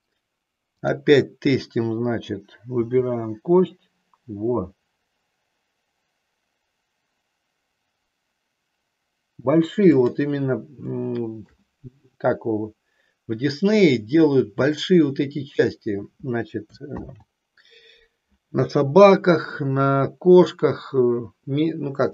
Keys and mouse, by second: 0.7-2.2 drag, 2.9 g, 10.0 click, 11.0 shift+middle click, 17.1 ctrl+z.